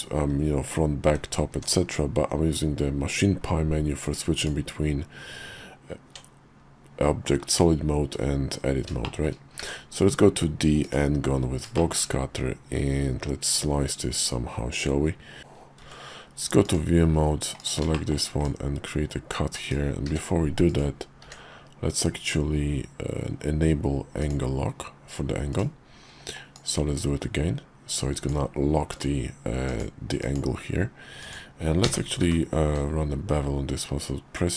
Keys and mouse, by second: 1.6 Tab, 5.2 Tab, 9.0 shift+click, 9.6 d, 11.8 shift+click, 15.4 `, 15.4 KP_5, 15.8 shift+v, 17.6 click, 17.9 shift+click, 18.4-19.5 drag, 20.1 d, 21.2 d, 26.5-28.3 drag.